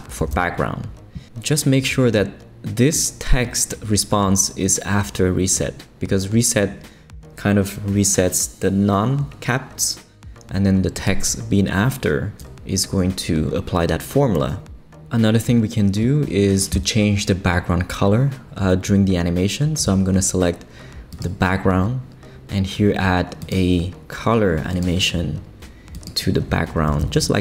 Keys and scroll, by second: 0.2 super+v, 26.9 super+v, 27.1 super+Return.